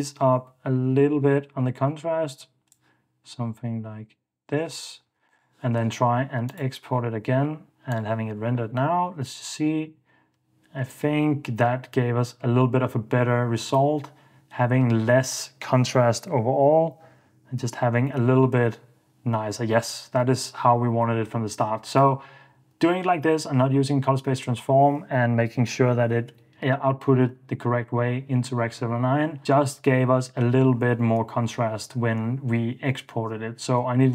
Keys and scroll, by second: 5.3 super+s.